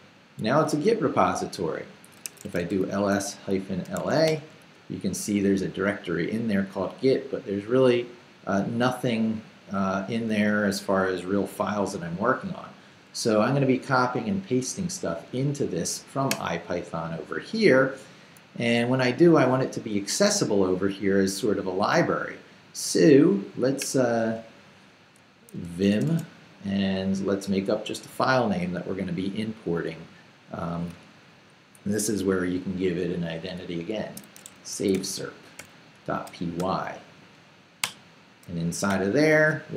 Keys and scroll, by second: 2.2 s, 2.4 space, 4.0 a, 4.3 Return, 25.3-26.4 typing, 33.8-37.1 typing, 37.8 Return, 38.9 i.